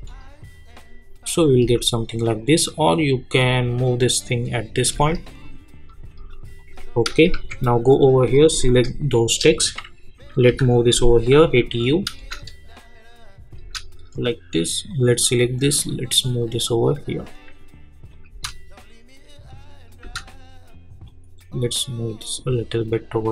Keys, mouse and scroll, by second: 0.8 space, 2.1-6.3 drag, 6.5 click, 7.3 j, 8.2 click, 10.5-11.9 typing, 14.9-18.1 drag.